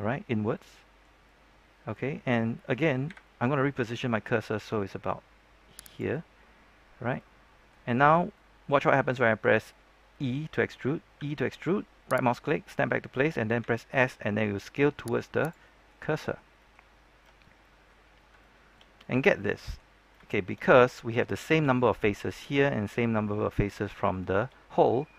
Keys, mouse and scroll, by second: 3.0 KP_3, 3.9-5.8 scroll up 1, 5.8 click, 6.8-7.1 scroll down 1, 7.1 middle click, 8.1 scroll down 1, 8.3 middle click, 11.1 e, 12.3 right click, 13.5 s, 15.3 click, 15.6 middle click, 16.7 scroll down 1, 17.0-17.6 scroll up 1, 17.6 middle click, 18.0 scroll up 1, 18.3 shift+middle click, 18.8-19.1 scroll up 1, 19.1 scroll down 1, 19.3 middle click, 19.9 scroll up 1, 20.2 shift+middle click, 20.6 scroll down 1, 20.8 middle click, 21.3-21.7 scroll up 1, 24.0-25.1 shift+middle drag.